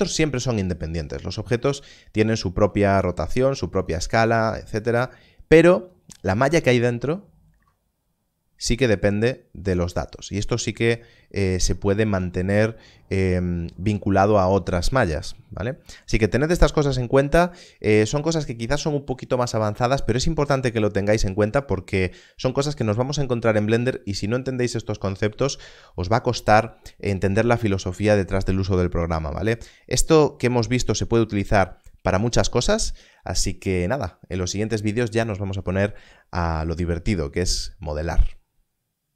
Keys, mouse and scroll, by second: 2.5 click, 2.6 r, 6.8 s, 6.9 Tab, 7.5 Tab.